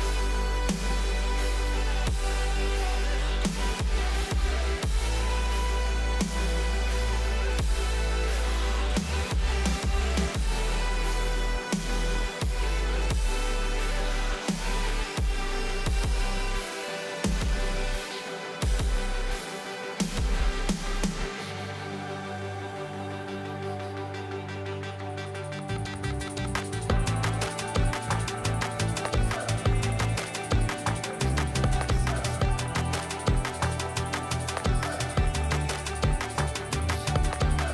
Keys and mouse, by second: 1.1 y, 1.2 y, 1.2 y, 2.0-2.3 drag, 2.3 ctrl+s, 2.9 s, 3.4 s, 3.5 s, 5.4-7.2 drag, 6.8 KP_0, 8.1 ctrl+s, 8.8 KP_1, 10.6 shift+d, 11.8 r, 13.9-14.6 s, 15.4 g, 18.2 x, 18.2 x, 18.3 x, 18.9 g, 20.8 KP_7, 22.9 shift+d, 23.7 x, 23.8 x, 24.3-26.8 drag, 27.5-28.5 drag, 29.7 g, 31.1 y, 31.1 y, 31.2 y, 32.0 r, 33.4-35.4 typing, 37.3 z, 37.3 z, 37.4 z.